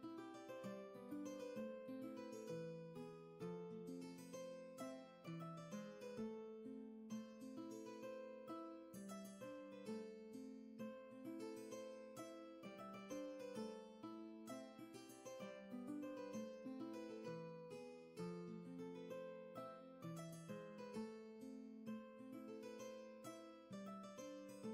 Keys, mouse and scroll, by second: 14.5 ctrl+z.